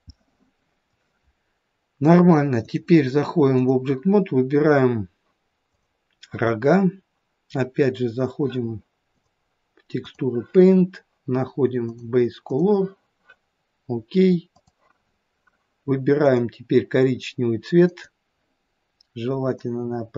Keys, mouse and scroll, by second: 0.2 middle click, 2.6 click, 9.1 click, 11.9 click, 16.3 click.